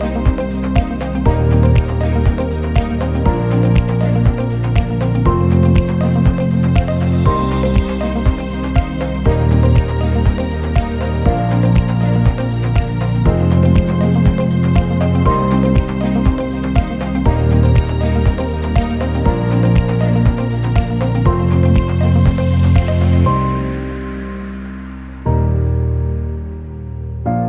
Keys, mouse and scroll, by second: 0.1 scroll down 1, 0.3 middle click, 1.8 click, 2.3 scroll up 2, 2.4 click, 5.0 click, 6.7 click, 7.4 0, 8.9 n, 9.1 n, 9.5-9.9 scroll down 13, 10.7 click, 11.0 click, 11.5 click, 12.0-13.4 drag, 13.5 click, 13.9 n, 14.5-15.3 ctrl+middle drag, 15.5-17.0 middle drag, 17.8 middle click, 19.3 click, 21.3 n, 21.6 click, 22.0 g, 24.0 click, 24.5 g, 25.7 click, 26.1 g.